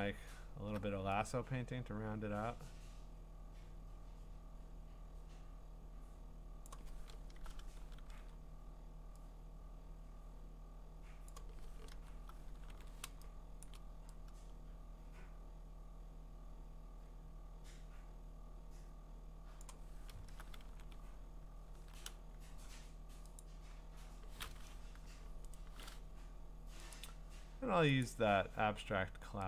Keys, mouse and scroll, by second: 0.2 scroll, 6.6 click, 7.2 alt+BackSpace, 8.1 ctrl+d, 11.3 click, 11.9 alt+BackSpace, 12.7 ctrl+d, 13.6 click, 19.6 click, 20.1 alt+BackSpace, 20.7 ctrl+d, 21.0-21.8 scroll, 23.4 click, 25.0 u, 25.5 right click, 26.9 click, 28.4 click.